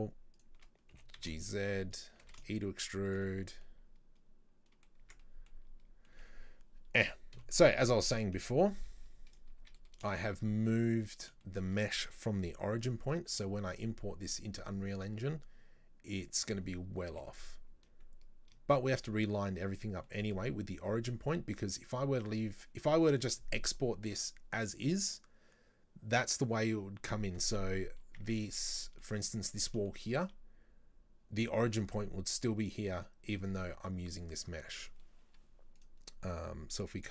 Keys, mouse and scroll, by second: 2.3 e, 3.7-14.5 middle drag, 4.9 scroll down 1, 5.1 Tab, 5.6-6.1 scroll down 4, 7.4 KP_7, 7.8 Tab, 8.5 z, 9.7 a, 17.2 g, 20.1-25.1 shift+middle drag, 28.3 Tab, 28.5 right click, 28.8-33.0 middle drag, 34.7-35.8 shift+middle drag, 35.8 right click, 36.3-37.1 scroll down 1.